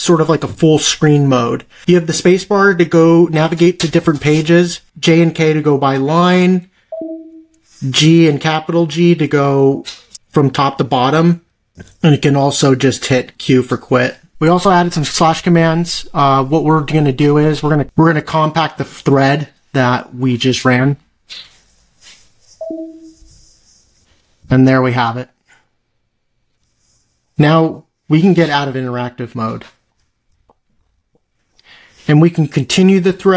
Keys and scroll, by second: 8.2 shift+g, 30.2 ctrl+c.